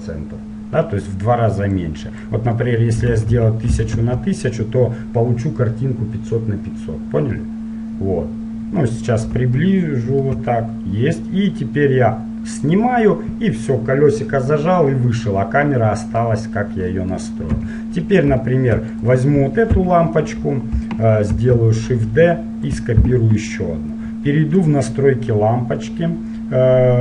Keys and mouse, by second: 2.0-3.8 drag, 3.4 KP_0, 7.9-11.6 middle drag, 12.7-14.5 drag, 14.5-17.1 middle drag, 17.1-18.2 drag, 17.6 KP_7, 18.2-19.9 drag, 20.0 KP_1, 21.5 shift+d, 24.8-26.0 drag, 26.0-27.0 middle drag.